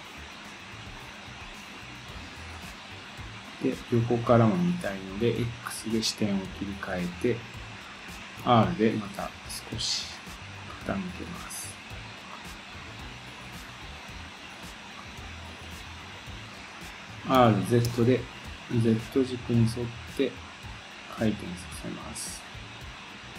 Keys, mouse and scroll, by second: 4.6 click, 11.9-12.3 scroll down 1, 12.3-14.9 middle drag, 14.9 click, 16.4-18.0 drag, 17.3 r.